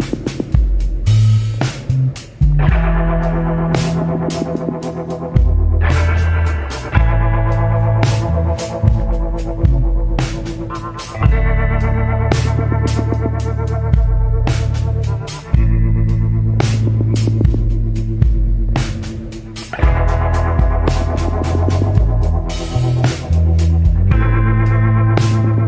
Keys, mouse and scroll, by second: 0.9 scroll up 1, 1.6 scroll down 1, 3.5 scroll up 1, 4.7 scroll down 1.